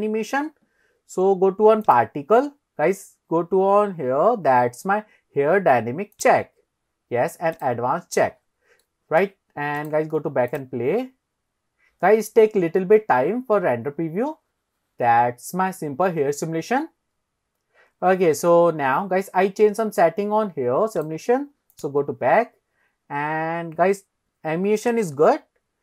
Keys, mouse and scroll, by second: 1.9 click, 6.5 click, 7.8 click, 8.5-9.2 scroll down 2, 8.9-9.2 middle drag, 9.8 drag, 10.5 click, 21.2 click, 21.7 click, 22.0 click, 25.1 scroll down 1.